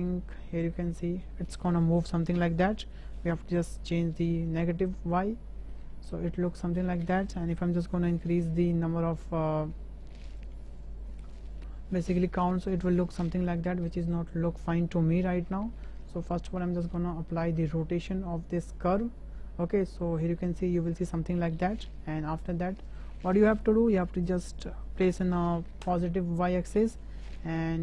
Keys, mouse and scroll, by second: 1.4 shift+drag, 2.5-4.5 drag, 5.2-5.7 middle drag, 8.3-14.1 drag, 14.0 right click, 15.4 ctrl+z, 15.9 shift+drag, 16.5 click, 17.3 ctrl+a, 22.9 click, 24.2-25.9 drag, 27.4-27.8 middle drag.